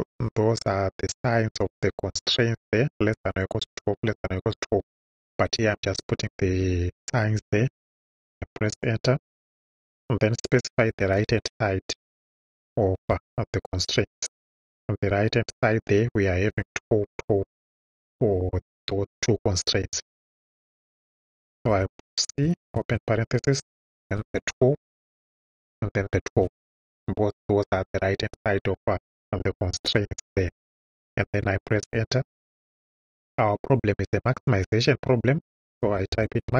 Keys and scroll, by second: 0.1 Right, 7.8 Return, 10.9 r, 11.2 h, 13.1 shift+s, 16.5 =, 21.7 c, 22.4 shift+c, 22.7 shift+9, 24.0 1, 24.3 2, 25.1 ,, 26.4 2, 27.8 Right, 31.8 Return, 35.6-36.5 typing.